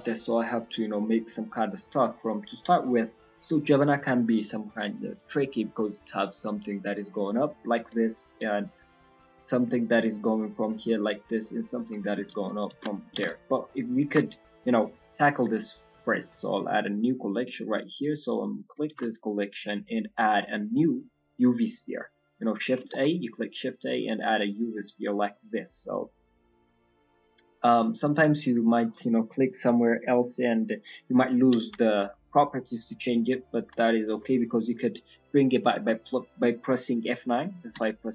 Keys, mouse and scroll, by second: 11.3 click, 11.3 d, 11.5 d, 11.9 d, 12.3 ctrl+z, 12.7 ctrl+z, 13.2 ctrl+z, 16.2 right click, 17.9 click, 18.9 shift+a, 23.0 shift+a, 27.0 click, 27.7 scroll down 2, 28.0 middle click, 28.5 click, 29.2 click, 29.9 click, 30.5 click, 30.8 middle click, 31.1 scroll up 1, 31.2-31.6 scroll down 1, 31.6 scroll down 2, 31.6 KP_1, 33.0-33.4 scroll up 3, 33.8 shift+middle click, 35.6 F9.